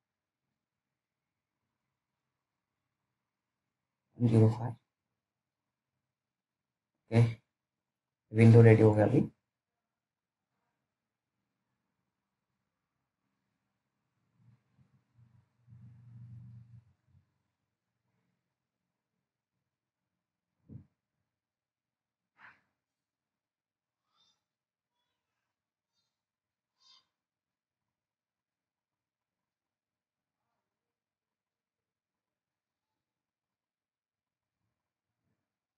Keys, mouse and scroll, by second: 2.0 click, 4.8-5.3 scroll up 1, 5.3-5.7 scroll down 1, 5.9 alt+middle click, 6.4-6.9 scroll up 1, 6.9 scroll down 1, 7.2 middle click, 7.2 middle click, 8.9-9.2 scroll down 1, 9.4 alt+middle click, 13.7-14.2 scroll up 1, 14.4 alt+middle click, 15.9 scroll down 1, 16.4 alt+middle click, 17.6-18.1 scroll up 3, 18.2 alt+middle click, 20.4 click, 23.4 ctrl+z, 24.9 click, 27.0-29.1 scroll down 1, 29.5 click, 32.8-34.2 scroll down 1, 34.4 alt+middle click.